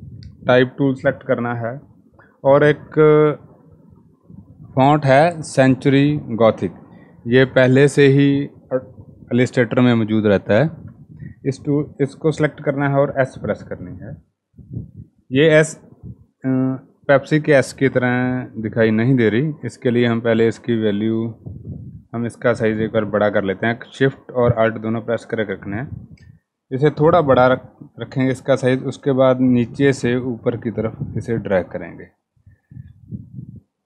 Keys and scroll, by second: 11.5 s.